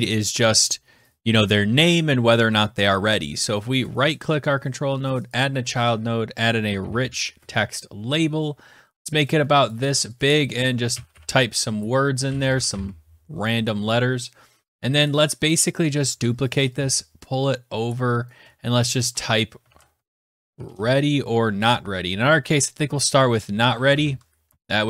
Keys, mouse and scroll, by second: 3.7 right click, 6.2-7.2 typing, 6.4 click, 9.5 click, 10.0 click, 10.5-13.1 typing, 14.6 click, 15.0 click, 15.3 click, 15.9 ctrl+d, 18.1 shift+click, 18.6 click, 18.8 click, 19.5 ctrl+a, 19.6-21.1 typing, 21.9-22.7 Left, 23.3-24.6 typing.